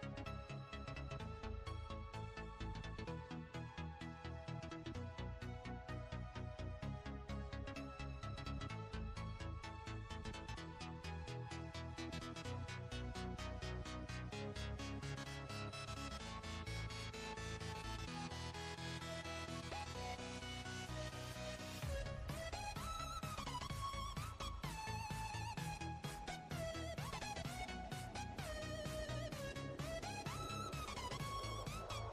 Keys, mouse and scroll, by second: 0.7 click, 1.1 Tab, 1.5 click, 3.4 b, 4.8 click, 7.0 click, 7.9 b, 9.5 click, 11.7 click, 12.3 Tab, 13.1 scroll down 1, 13.7 click, 15.1 click, 16.0 KP_1, 18.1 ctrl+KP_3, 18.7-19.7 scroll up 8, 20.5 Tab, 21.2 click, 23.0 click, 24.0 b, 25.9 click, 27.7 click, 28.5 b, 29.4 click, 29.9 b, 30.7 click, 31.3 click.